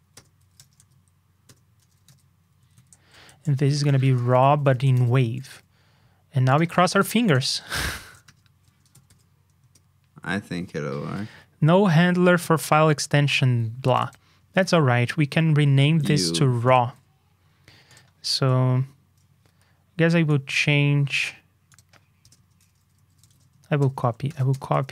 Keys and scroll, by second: 6.9 super+c, 7.7 ctrl+c, 9.0 super+v.